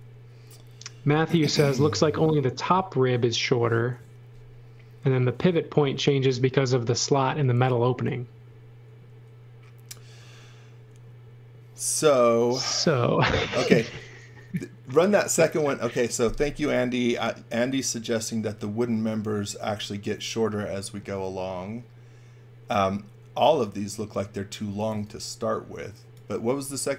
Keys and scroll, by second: 13.1 space, 24.4-25.4 typing.